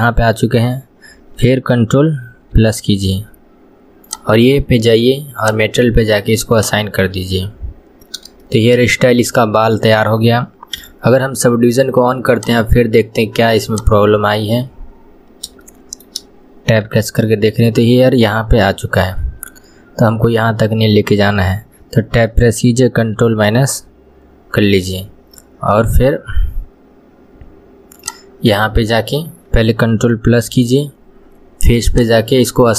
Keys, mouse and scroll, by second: 0.1-2.6 shift+middle drag, 2.6 ctrl+KP_Add, 4.1 click, 5.4 click, 6.6 click, 7.4 scroll down 1, 8.5 shift+middle click, 8.9 scroll down 1, 9.3-10.8 middle drag, 10.8 KP_1, 12.4 click, 15.0 scroll up 2, 15.7-17.1 shift+middle drag, 17.1 Tab, 18.6 scroll up 2, 19.9-20.4 scroll down 2, 22.0 Tab, 23.2 ctrl+KP_Subtract, 28.1 click, 30.6 ctrl+KP_Add, 32.0 click.